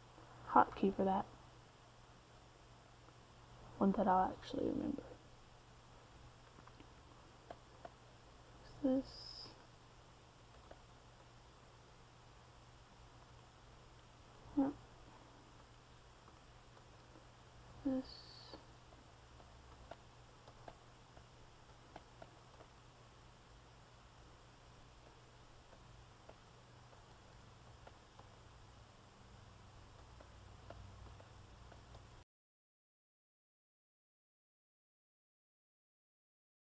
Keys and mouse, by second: 5.3 middle click, 5.9 c, 6.5 f, 8.5-13.8 drag, 13.8-17.2 middle drag, 20.5 f, 20.9-24.1 drag, 24.8 middle click, 26.0 c, 27.1 f, 28.2-30.8 drag, 32.3-33.7 drag, 33.7-36.6 middle drag.